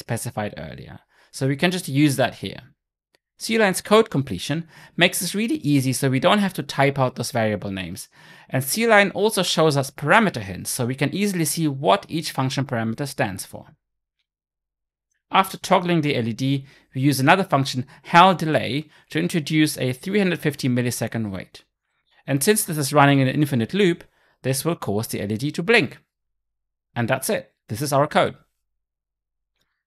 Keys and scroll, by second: 5.4 Return, 11.4 Return, 17.1 Return.